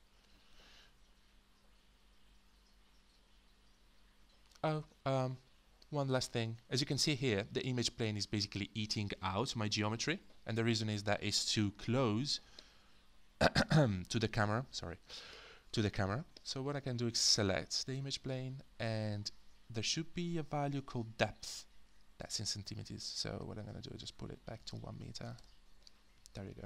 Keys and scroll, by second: 11.5 space, 25.2 0, 25.4 Return.